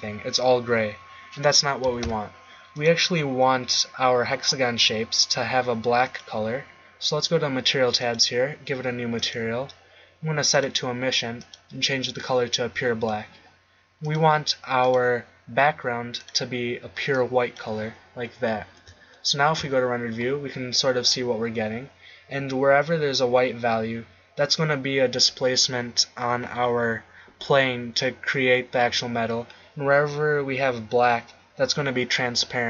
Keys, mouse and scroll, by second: 1.9 z, 2.0 z, 2.7-4.5 drag, 6.0-8.0 drag, 19.5 shift+z.